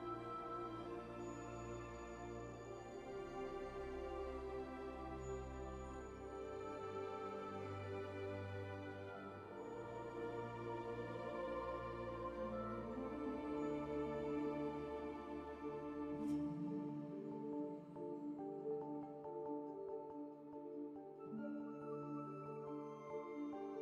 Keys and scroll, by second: 0.6 1, 0.8 q, 2.6 alt+x, 3.5 alt+x, 3.6 r, 10.5 w, 19.2 q, 20.2 alt+z, 21.0 w.